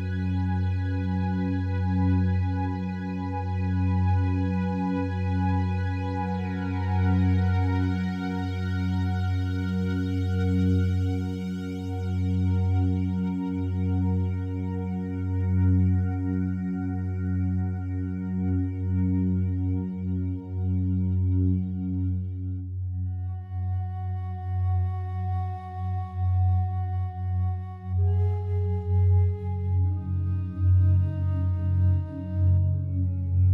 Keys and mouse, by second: 1.5 click, 2.7 click, 5.1 click, 6.0-6.9 typing, 7.2 Return, 10.9 click, 12.8 click, 14.8 click, 20.0 click, 22.5-23.4 drag, 24.0 click, 25.9-26.2 typing, 27.9 Return, 28.9 click, 29.8 click, 31.2-31.9 typing, 33.1 typing, 33.3 Return.